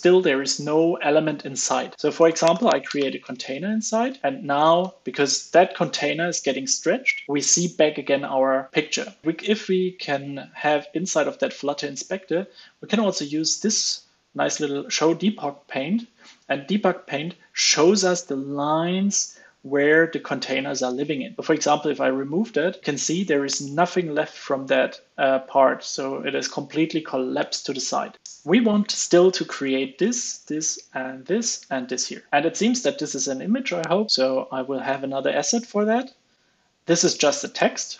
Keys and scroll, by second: 3.4 super+s, 4.3 super+s, 4.7 alt+super+l, 5.0 super+s, 21.4 super+x, 21.8 super+s, 23.5 super+z, 24.2 super+s.